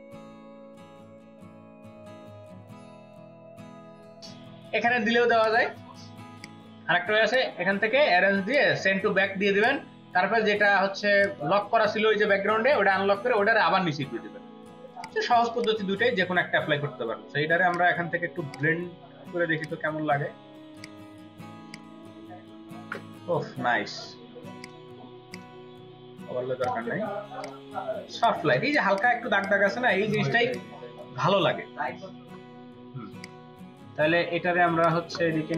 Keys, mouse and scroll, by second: 7.2 right click, 28.5 ctrl+space, 28.7 ctrl+click, 28.8 ctrl+double click, 29.6 space, 30.1 ctrl+alt+click, 31.1 space, 35.3 space.